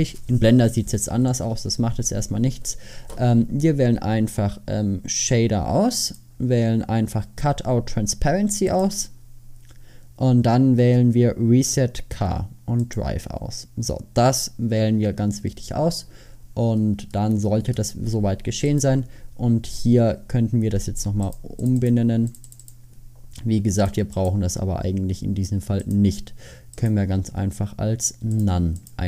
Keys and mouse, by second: 9.5-12.9 middle drag, 14.6-28.9 drag.